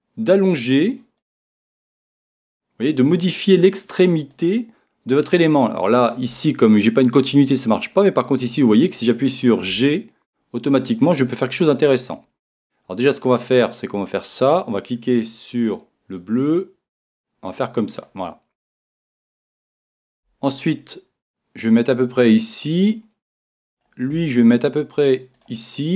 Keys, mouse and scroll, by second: 0.5 click, 1.6-3.2 right drag, 1.6 g, 4.4 click, 9.7-10.9 right drag, 9.7 g, 12.0 click, 16.1 right click, 20.1-21.6 right drag, 20.1 g, 21.7 click, 24.1-25.6 right drag, 24.1 g, 25.4 click.